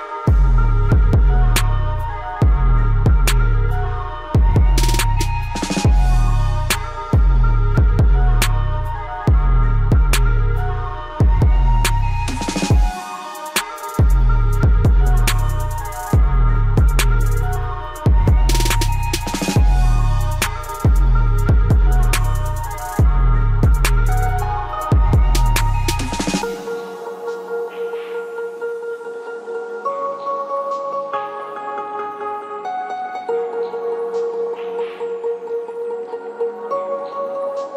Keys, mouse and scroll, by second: 1.8 right click, 4.3 click, 5.6 ctrl+Page_Down, 9.8 click, 10.3 scroll up 1, 12.6-15.4 drag, 15.4 scroll down 1, 16.5-20.6 drag, 20.6 scroll down 1, 22.1-23.0 scroll up 1, 25.6-26.9 drag, 26.9 scroll down 1, 29.6 click, 30.4 g, 31.3-35.0 drag.